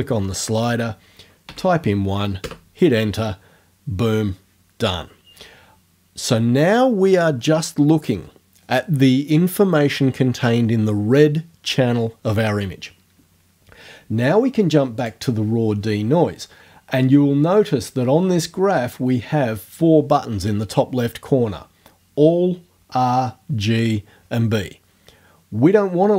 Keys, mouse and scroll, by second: 1.5 KP_1, 2.4 KP_Enter, 2.4 middle click, 15.0 click.